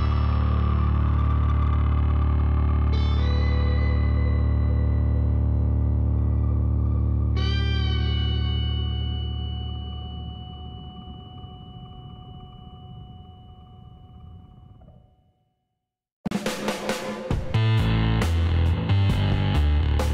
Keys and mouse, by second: 0.0-1.8 drag, 3.4-10.7 middle drag, 10.7-12.4 drag, 13.7 z, 14.5 Tab, 15.5 a, 16.2-17.8 middle drag, 18.2 middle click, 18.8-20.0 middle drag, 19.8 Tab.